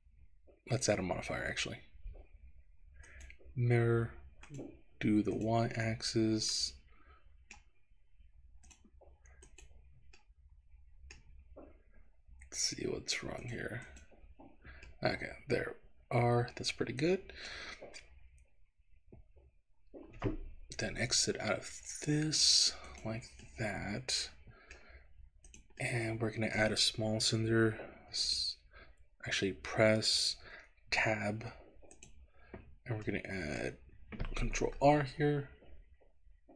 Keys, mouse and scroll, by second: 0.8-3.3 drag, 4.5 click, 5.4 click, 6.6-7.6 middle drag, 8.6 click, 10.3-11.4 middle drag, 13.4 click, 15.0-17.7 middle drag, 23.0 click, 23.5-24.8 middle drag, 25.5 click, 25.9 middle click, 28.3 click, 30.9 Tab, 31.9 click, 32.6-33.2 scroll up 1, 33.2 middle click, 34.6 ctrl+r.